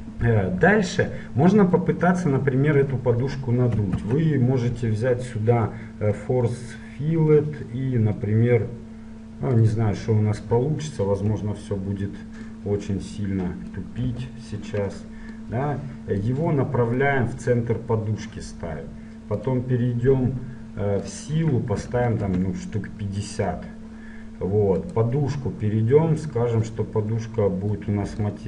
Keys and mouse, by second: 4.1 shift+a, 11.4 KP_7, 14.2 KP_1, 15.5-16.6 drag, 16.6-19.5 middle drag, 19.5-23.0 drag, 24.9-27.0 right drag, 26.8-28.4 drag.